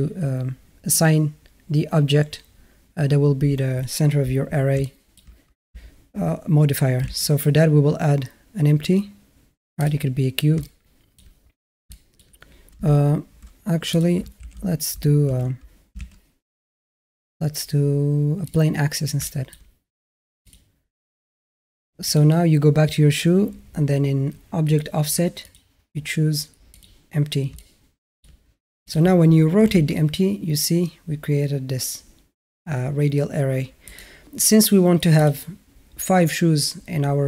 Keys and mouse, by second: 4.7-5.0 shift+middle drag, 7.0 shift+a, 10.4-11.0 alt+middle drag, 11.7 alt+middle drag, 12.8 ctrl+a, 13.8 click, 14.2 ctrl+z, 15.1 ctrl+z, 15.8 shift+a, 19.1 middle drag, 20.3 click, 21.9 click, 24.5 click, 25.2 click, 27.4-28.0 alt+middle drag, 28.7 click, 29.5 r, 35.0 click.